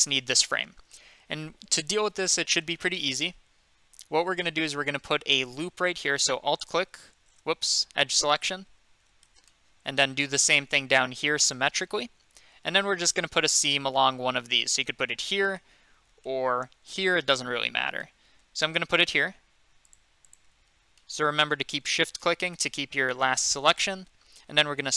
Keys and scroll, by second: 7.7 2.